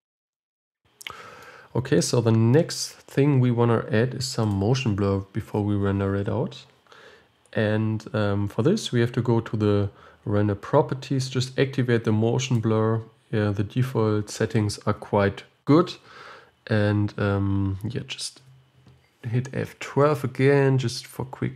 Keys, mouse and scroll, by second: 0.0 click, 0.6-12.8 middle drag, 12.8 click.